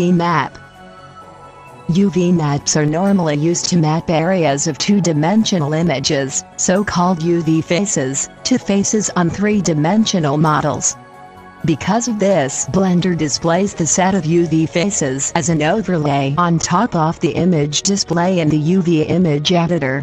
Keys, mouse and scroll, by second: 10.4 right click.